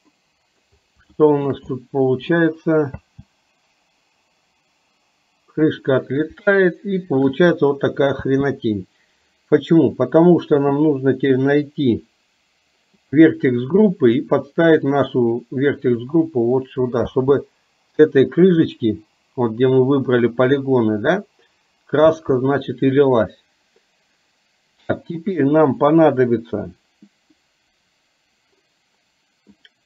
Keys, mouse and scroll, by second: 0.2-0.7 middle drag, 1.2-1.6 shift+middle drag, 1.8-2.3 middle drag, 3.1 space, 6.6-7.3 shift+middle drag, 8.3 space, 13.1 click, 15.0-16.1 drag, 17.2 space, 22.2 space.